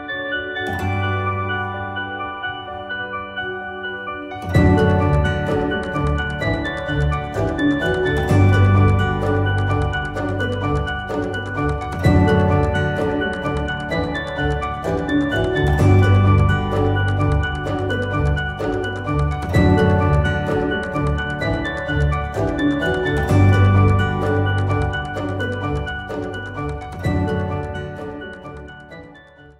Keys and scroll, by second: 20.4 F9, 24.6 F9.